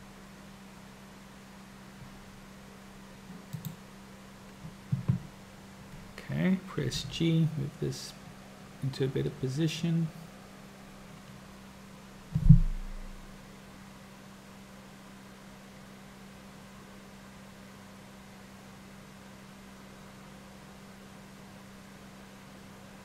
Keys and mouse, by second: 9.3 g.